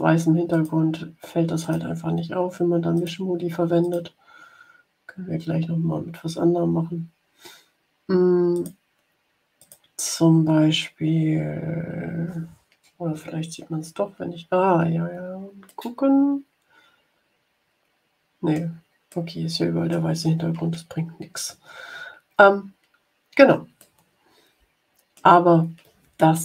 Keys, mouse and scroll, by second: 0.4 click, 1.5 click, 2.9 click, 3.7 click, 8.4 click, 9.5 click, 13.0-13.9 ctrl+scroll down 4, 15.6-17.1 drag, 17.1-18.6 middle drag, 19.0-20.0 middle drag, 21.3-21.7 ctrl+scroll up 2, 22.2 ctrl+scroll up 2, 23.0 ctrl+scroll up 2, 23.7 middle click, 24.1-25.1 drag.